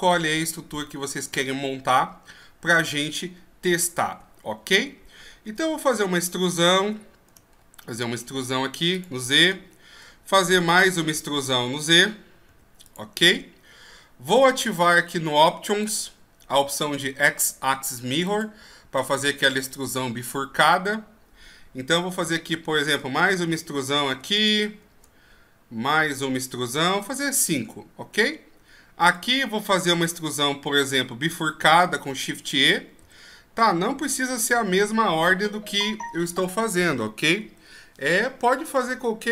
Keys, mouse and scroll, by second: 0.6-1.5 shift+scroll up 4, 1.5 shift+scroll up 1, 2.3-2.7 scroll down 2, 4.1 Tab, 5.5 e, 9.6 shift+scroll up 4, 10.6 e, 15.8 click, 18.3 click, 22.2 e, 25.3 scroll down 2, 25.9 e, 27.9-29.1 scroll up 1, 29.1 right click, 32.1 shift+e.